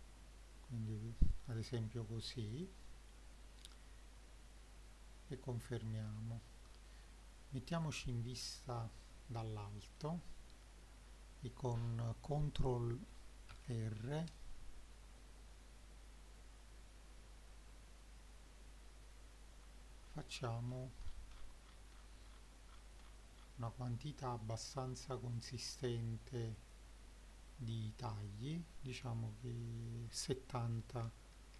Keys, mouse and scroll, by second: 2.5 click, 3.2 scroll down 1, 4.2-6.1 shift+middle drag, 6.4-7.2 scroll down 1, 7.7 KP_7, 8.7-9.1 scroll down 3, 9.1 middle click, 9.8 middle click, 13.5 ctrl+r, 26.6 click, 28.3-31.5 drag.